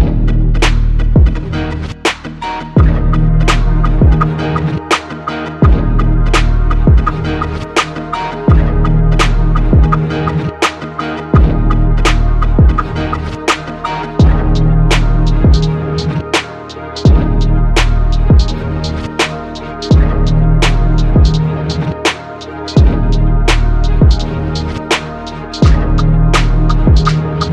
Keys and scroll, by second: 2.0 ctrl+s, 9.0 ctrl+n, 16.2 Escape, 19.5 ctrl+s, 21.7 Escape.